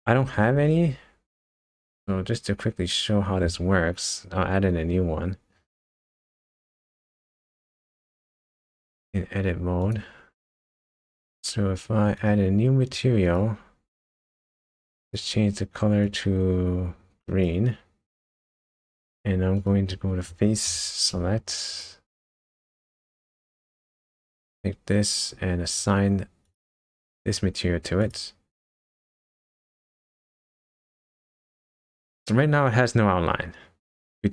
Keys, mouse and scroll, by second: 0.7-2.1 scroll up 1, 6.3 click, 7.0 Tab, 8.2 click, 9.8 click, 12.8 click, 13.2 click, 15.0 click, 19.6 click, 20.7 3, 21.7 shift+click, 22.7 shift+click, 23.4 alt+click, 27.2 click, 28.0 click, 30.0 Tab, 30.6 click.